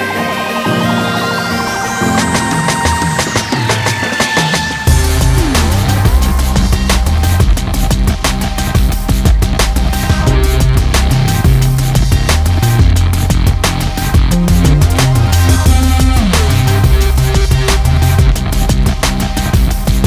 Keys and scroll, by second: 4.2 ctrl+z, 7.0 ctrl+z, 9.3 ctrl+space, 9.9 ctrl+space, 12.0-15.9 ctrl+z, 16.7 ctrl+z.